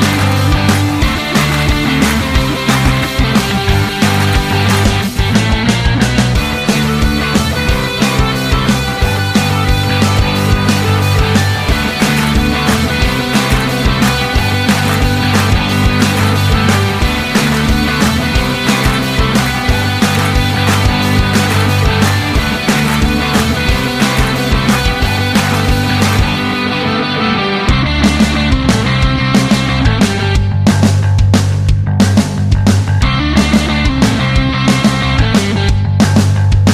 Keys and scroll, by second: 24.6-26.0 typing.